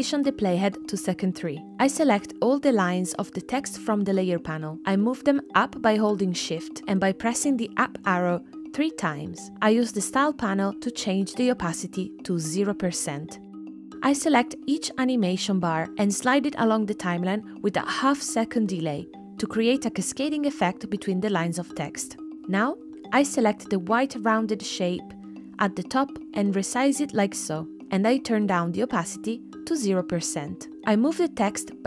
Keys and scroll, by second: 7.4 shift+Up, 12.2 space, 19.6 space, 21.9 space.